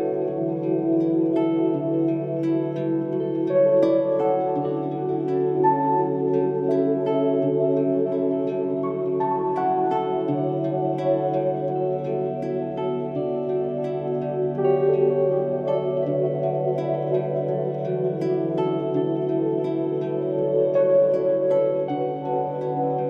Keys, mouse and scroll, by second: 0.2 shift+middle click, 1.0-1.4 scroll up 3, 2.2-2.6 scroll down 5, 2.8 KP_1, 3.3 click, 3.9-4.2 scroll up 4, 4.2 shift+middle click, 4.9-6.8 scroll up 10, 5.9 shift+middle click, 6.8 shift+middle click, 7.7 c, 7.8 middle click, 7.9 c, 17.9 middle click, 18.2-18.7 scroll down 7, 18.7-20.1 middle drag, 20.1 r, 22.3 g.